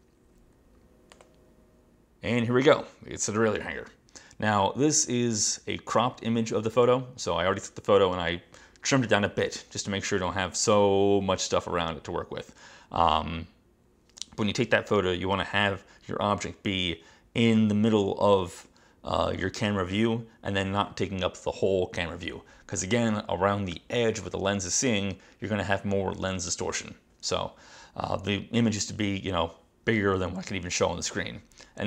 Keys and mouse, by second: 1.2 click.